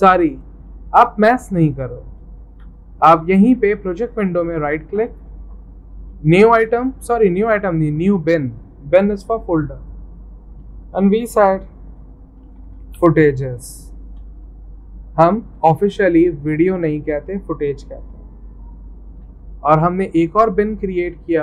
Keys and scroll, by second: 2.5 alt+Tab, 12.1-14.3 typing, 15.3-16.1 typing, 18.9-21.4 typing.